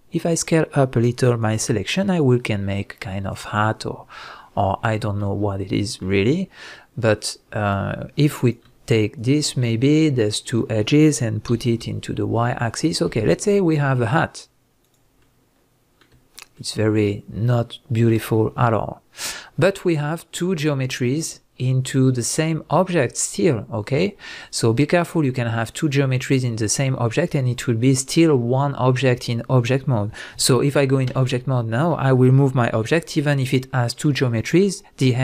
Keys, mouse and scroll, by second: 1.4 click, 1.6 g, 3.4 click, 3.6-7.6 middle drag, 5.5 scroll up 2, 7.6 click, 8.4 click, 9.2 shift+click, 9.6-14.9 middle drag, 11.5 g, 14.9 click, 15.2-19.2 middle drag, 16.0 scroll down 1, 16.1 Tab, 18.1 Tab, 31.1 Tab, 31.1 middle drag, 31.3-31.7 scroll down 1, 32.7 g, 33.5 right click, 33.8-34.3 middle drag, 34.3 scroll up 1, 34.5 middle click.